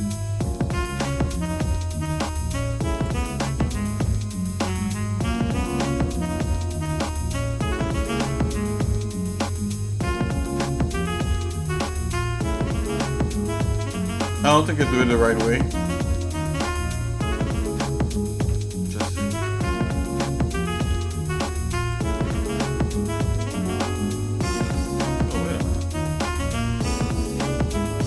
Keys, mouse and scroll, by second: 1.0 space, 4.1 shift+middle click, 4.7 Tab, 5.4 shift+middle click, 6.2 scroll up 1, 6.7 scroll up 1, 7.0 shift+middle click, 7.9 middle click, 8.4 scroll up 2, 9.0-11.0 shift+middle drag, 11.3 middle click, 11.7 shift+middle click, 12.3 scroll up 2, 12.8-13.8 scroll down 5, 13.9 shift+middle click, 14.5 middle click, 15.0-15.5 scroll up 2, 15.7 middle click, 16.2-16.5 scroll up 2, 16.9 shift+middle click, 18.4 Tab, 18.9 click, 19.3 Tab, 20.8 ctrl+z, 21.8 click, 22.2 Tab, 23.3-23.9 scroll down 2, 24.1 shift+middle click, 24.7 Tab, 25.2 middle click, 25.9 middle click, 26.7-27.3 scroll up 2.